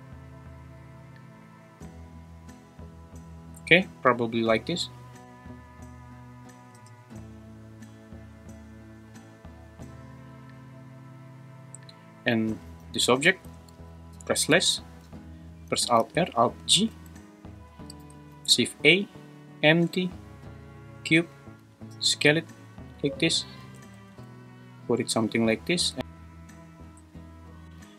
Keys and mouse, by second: 6.9 space, 12.9 g, 13.3 Escape, 14.2 /, 16.0 alt+r, 16.5 alt+g, 18.0 shift+a, 21.6 s, 23.1 `, 23.6 g, 24.0 z, 25.6 click.